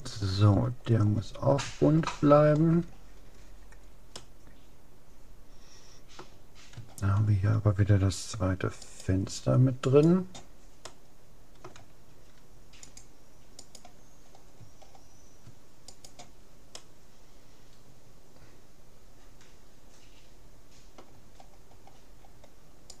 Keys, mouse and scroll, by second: 4.0-5.8 middle drag, 6.8-8.8 middle drag, 8.8-11.6 right drag, 10.8-12.6 middle drag, 12.8-14.6 drag, 13.6-14.8 right drag, 18.0 middle click, 21.4-23.0 middle drag.